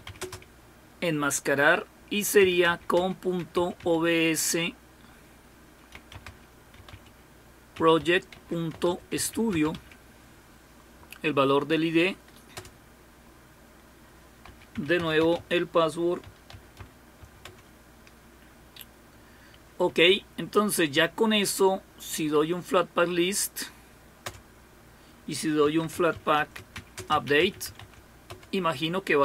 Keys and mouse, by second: 0.0-0.5 typing, 2.2-4.3 typing, 5.7-10.2 typing, 12.1 typing, 15.2-17.7 typing, 19.9 Up, 20.1 Up, 25.4-28.3 typing.